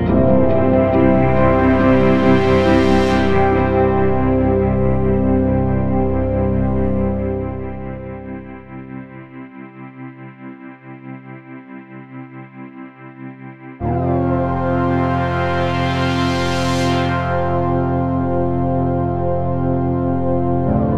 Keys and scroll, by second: 0.0-2.5 typing, 3.8-7.3 typing, 8.9 p, 9.7 p, 10.4 p, 11.1 p, 12.8 p, 13.6 p, 15.0 p, 17.6 p.